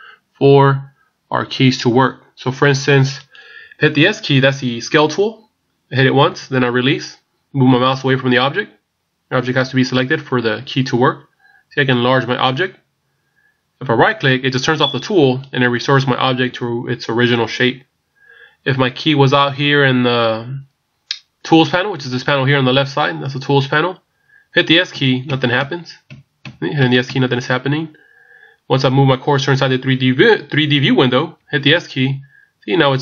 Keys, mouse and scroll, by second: 3.3 right click, 6.3 s, 25.3 s.